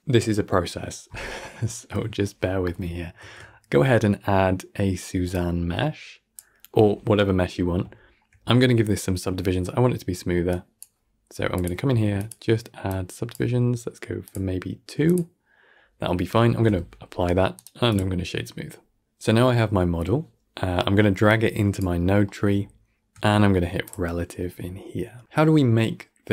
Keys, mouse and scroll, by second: 2.5-3.1 middle drag, 3.1 shift+a, 6.6-7.5 middle drag, 7.5-7.8 scroll up 5, 7.8-10.4 middle drag, 10.4-11.5 drag, 12.0-16.4 drag, 16.4 ctrl+a, 17.4-19.0 right drag, 19.0 click, 21.1 click, 22.1-23.7 middle drag, 23.7 click, 24.4-26.3 scroll down 17.